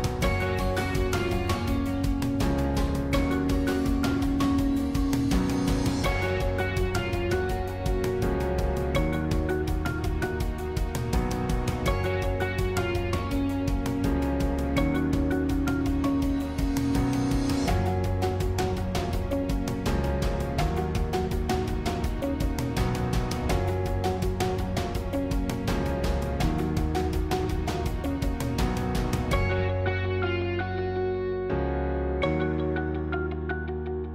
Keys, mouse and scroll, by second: 1.4 shift+click, 1.8-4.6 middle drag, 4.6 shift+click, 5.0-7.6 middle drag, 7.6 shift+click, 8.0-11.6 middle drag, 11.6 click, 12.7 s, 20.7 g, 26.6 click, 31.0 click, 33.0-34.1 middle drag.